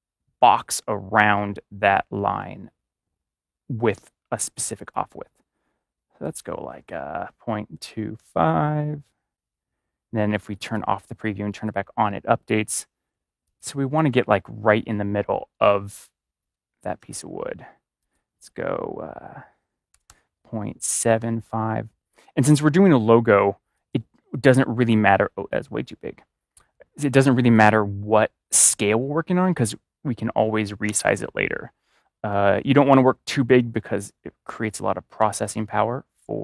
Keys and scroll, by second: 7.7 2, 8.8 typing, 19.8 BackSpace, 20.0 BackSpace, 21.1 typing, 30.8 BackSpace, 35.1 5.